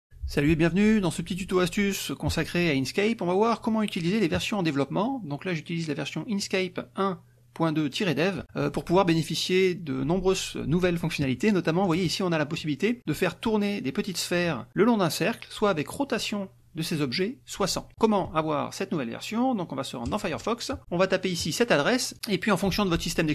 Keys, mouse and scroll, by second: 11.8 click, 20.0 click, 20.8 click.